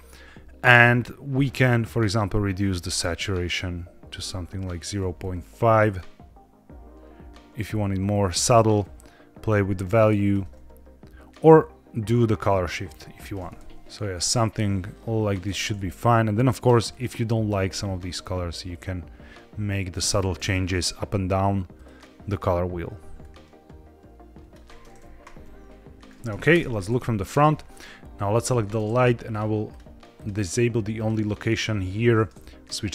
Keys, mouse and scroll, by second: 1.6-4.7 drag, 5.1-8.2 shift+drag, 8.7-10.2 shift+drag, 11.2-13.2 shift+drag, 13.5 ctrl+z, 13.8-15.2 shift+drag, 16.2 click, 16.8 click, 21.6 click, 22.2 click, 26.4 KP_0, 27.1-27.9 scroll down 2, 27.9 click, 28.6 shift+middle click, 29.2 click, 30.0-31.9 drag, 32.6-32.9 drag.